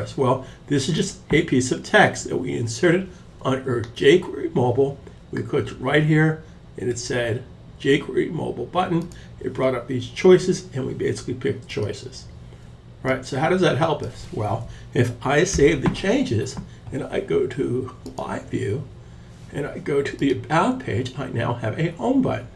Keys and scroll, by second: 14.9 super+s.